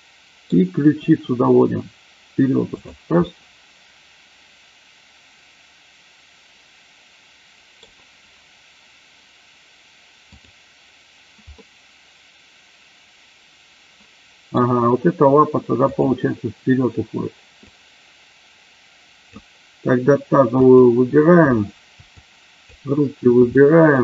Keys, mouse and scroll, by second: 1.0 r, 2.7 click, 3.3-7.8 middle drag, 10.3-10.8 drag, 11.5-14.8 middle drag, 15.9-16.6 drag, 18.0-19.3 drag, 20.5 click, 22.1-22.8 shift+drag, 23.5-23.9 middle drag.